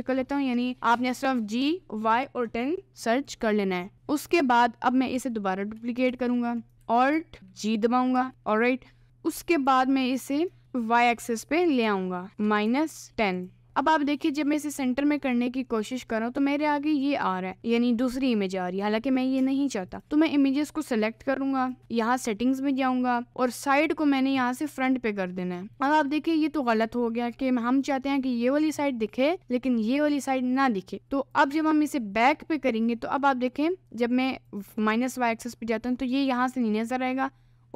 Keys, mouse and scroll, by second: 6.1 shift+d, 8.2 alt+g, 8.3 middle click, 9.7 r, 11.2 g, 12.3 g, 13.9 middle click, 14.0-14.4 scroll up 2, 14.4 middle click, 14.9 scroll up 2, 15.2 middle click, 16.0-17.1 scroll up 2, 17.1 middle click, 18.6-19.7 middle drag, 19.9 click, 20.1 middle click, 21.6 click, 24.3 click, 25.7 middle click, 28.8 middle click, 31.4 click, 32.0 middle click, 34.5 click, 36.5-37.7 middle drag.